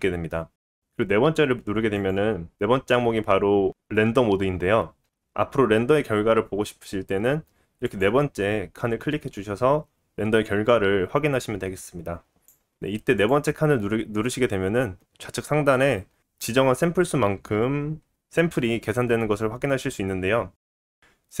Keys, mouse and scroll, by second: 2.3 click, 3.0-13.6 middle drag, 12.5 click, 13.6-14.3 drag, 14.3-21.4 middle drag.